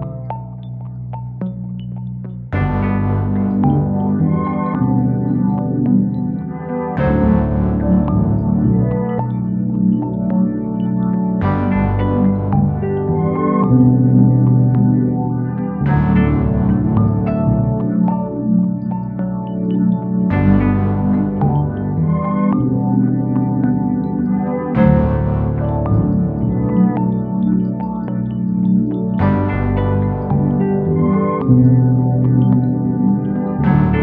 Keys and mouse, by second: 1.4 g, 2.4 g, 3.6 Tab, 6.6 ctrl+space, 8.1 KP_1, 9.7 r, 10.2 drag, 10.7 click, 11.4-11.9 middle drag, 12.5 r, 13.0 click, 13.2 g, 13.9 click, 14.5 middle click, 16.8 KP_1, 18.0 shift+d, 18.5 click, 19.1 s, 19.7 click, 20.0 r, 20.4 click, 20.6 g, 21.0 click, 23.4-24.2 middle drag, 24.9 Tab, 25.8 middle click, 26.6 click, 27.6 ctrl+KP_Add, 28.5 ctrl+KP_Add, 29.3 shift+middle click, 29.7 middle click, 30.5 g, 30.9 z, 31.3 z, 33.9 click.